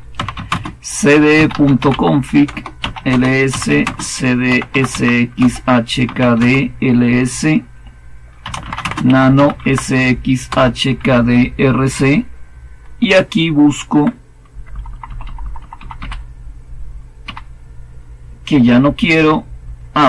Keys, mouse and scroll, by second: 0.0-6.6 typing, 8.1-13.9 typing, 14.4 Up, 14.7 Up, 14.8 Up, 15.0 Up, 15.2 Up, 15.3-17.8 typing.